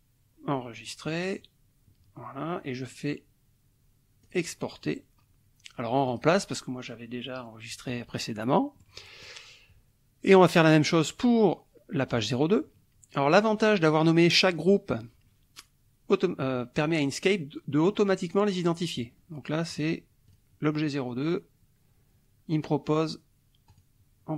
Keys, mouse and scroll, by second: 0.8 click, 4.3 click, 6.0 click, 8.8-9.4 scroll up 1, 12.2 click, 19.7 click, 20.3 click, 23.7 click.